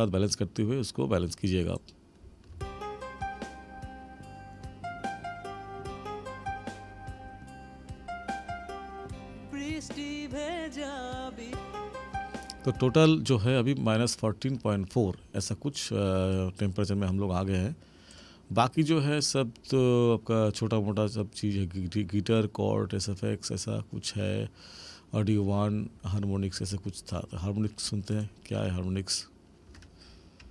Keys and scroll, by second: 2.5 space, 12.9 space.